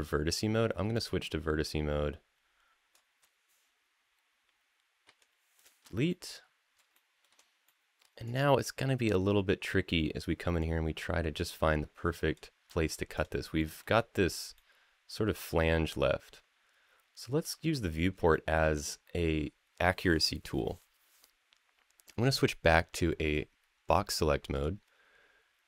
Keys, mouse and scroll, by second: 0.7-2.7 drag, 4.8 Delete, 5.9-6.5 middle drag, 6.7-7.0 shift+middle drag, 7.4 middle click, 8.0 scroll up 1, 10.4-12.2 drag, 12.9 click, 13.4 middle drag, 13.7-14.3 scroll down 1, 14.3-17.4 middle drag, 17.7 scroll down 1, 18.1 shift+middle click, 22.1-24.5 drag.